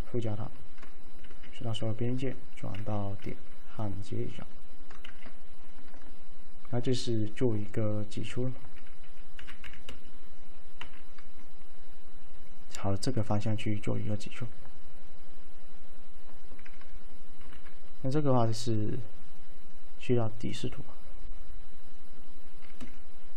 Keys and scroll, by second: 1.3 ctrl+a, 2.8 alt+1, 5.1 ctrl+a, 9.2-10.9 typing, 17.5 v, 22.9 v.